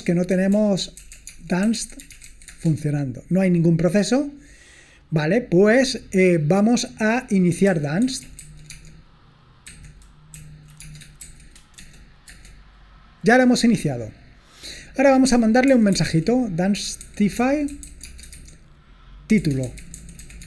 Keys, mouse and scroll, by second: 0.0-2.8 typing, 7.4-12.2 typing, 15.4-20.4 typing.